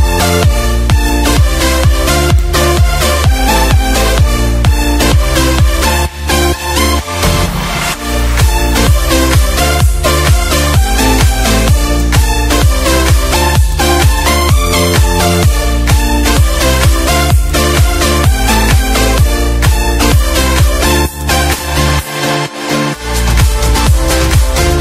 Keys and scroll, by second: 3.3 Delete, 4.5 ctrl+d, 9.2 Down, 11.0 ctrl+/, 13.4 ctrl+z, 20.5 Page_Down.